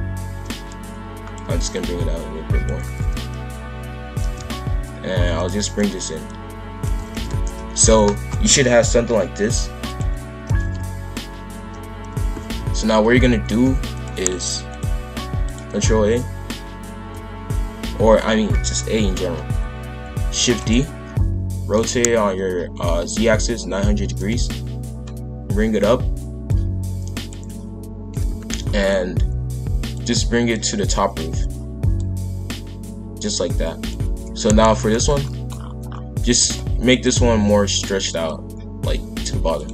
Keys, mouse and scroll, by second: 1.7 click, 4.2 shift+f, 5.7 click, 6.2 click, 7.0 shift+f, 9.3-10.4 drag, 10.4 shift+f, 14.7-16.0 drag, 16.0 a, 20.3 shift+d, 21.4 r, 26.4 click, 28.0 shift+f, 29.9 click, 31.9 click, 34.4 KP_5, 34.6 KP_1, 35.2 shift+middle click, 35.5-36.1 scroll up 7, 36.1 s, 37.1 s.